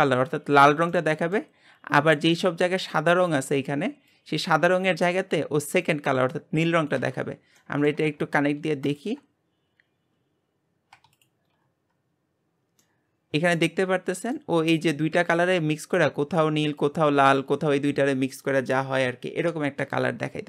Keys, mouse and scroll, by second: 11.2 ctrl+shift+click, 12.8-14.7 middle drag, 14.7 scroll up 1.